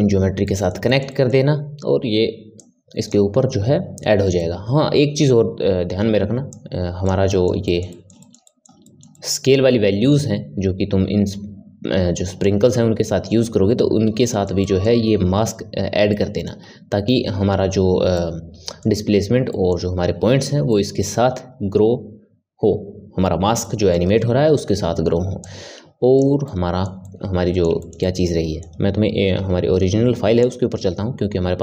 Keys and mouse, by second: 2.5-4.3 drag, 4.3-6.5 middle drag, 6.5 click, 7.3-25.4 middle drag, 25.4-26.4 drag, 26.4-30.4 middle drag.